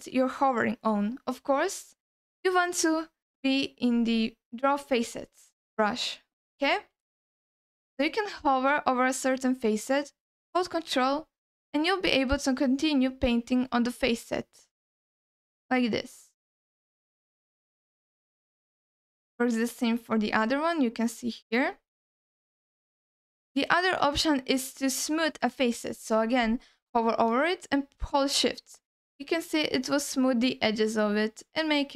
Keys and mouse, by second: 2.6-4.0 drag, 5.0 click, 6.9 f, 7.8 f, 8.6 f, 11.1-18.1 ctrl+drag, 18.7 alt+middle click, 20.1-21.7 ctrl+drag, 22.6 alt+middle click, 27.6-31.9 shift+drag.